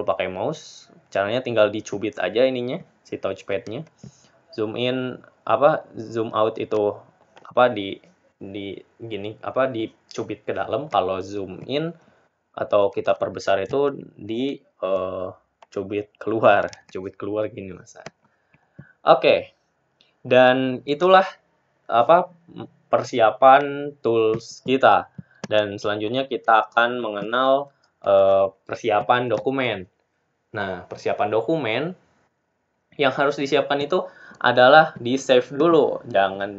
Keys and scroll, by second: 32.8 Delete.